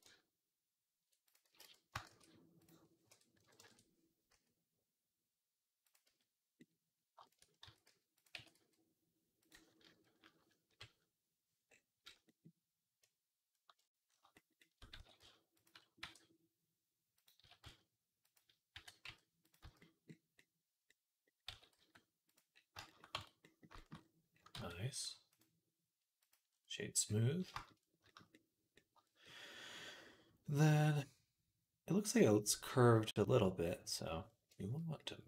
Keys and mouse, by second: 1.3 x, 1.9 shift+a, 2.7-6.5 middle drag, 2.9 r, 4.2 s, 5.9 z, 6.5-25.1 middle drag, 7.5 s, 8.2 s, 10.5 KP_3, 14.8 s, 15.8 e, 17.2 s, 18.6 g, 19.5 z, 21.3 s, 23.0 Tab, 24.4 ctrl+s, 25.1-28.4 right drag, 29.9-32.3 drag, 33.4 click, 34.3-35.2 shift+right drag.